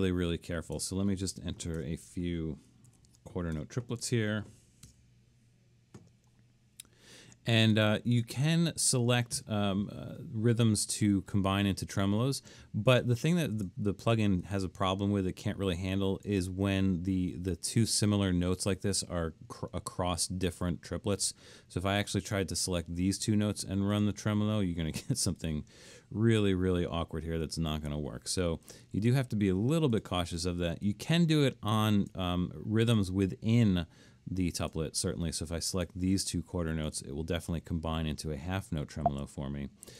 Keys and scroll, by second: 0.8-1.8 typing, 2.9 alt+3, 3.6-4.9 typing, 8.5 Escape, 27.8 super+z, 29.0 super+z, 39.1 super+z.